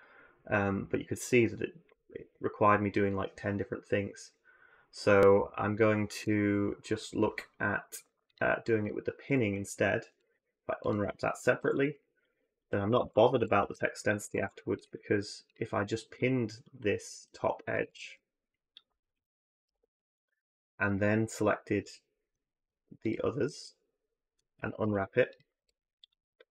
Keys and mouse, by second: 9.1 ctrl+click, 10.0 click, 10.6 ctrl+click, 11.4 u, 12.5 click, 12.7-14.2 typing, 14.6 click, 17.5 a, 17.7 a, 19.5 p, 24.6 i, 25.4 u, 26.3 a, 26.5 a.